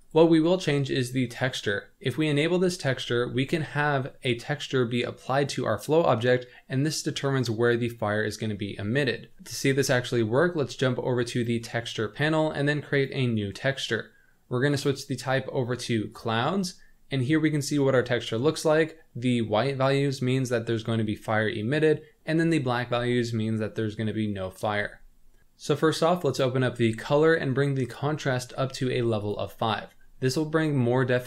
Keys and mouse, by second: 0.1 drag, 2.1 click, 3.3 middle drag, 11.3 click, 12.9 click, 14.6-16.2 drag, 26.3 click, 27.9-29.2 drag.